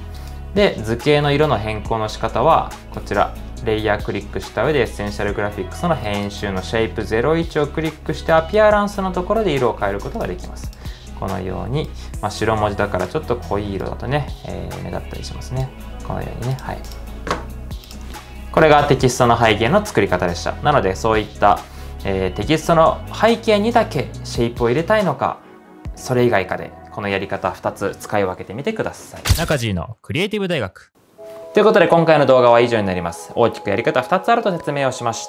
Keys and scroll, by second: 29.2 typing.